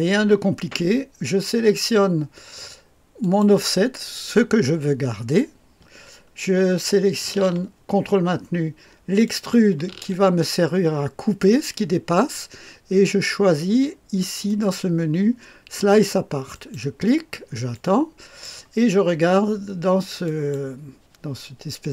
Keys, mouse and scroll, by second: 3.2 click, 9.2 ctrl+click, 14.5 click, 16.5 click, 17.7 click, 20.2 click, 21.1 click.